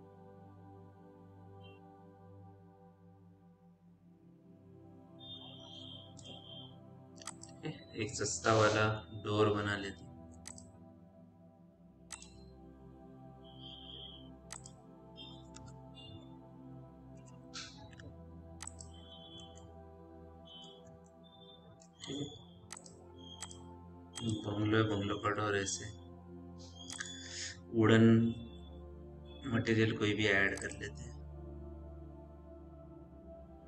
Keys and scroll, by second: 8.6 5, 16.1 BackSpace, 17.0 KP_0, 17.8 KP_5, 19.6 p, 25.6 m.